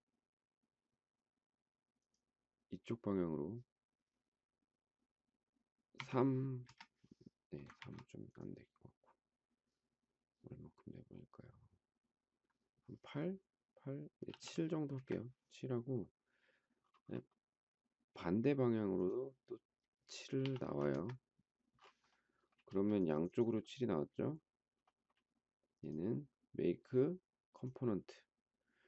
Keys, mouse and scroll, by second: 6.0 3, 6.3 Return, 7.8 ctrl+z, 14.3 7, 14.6 Return, 20.3 7, 20.6 Return, 22.6 space.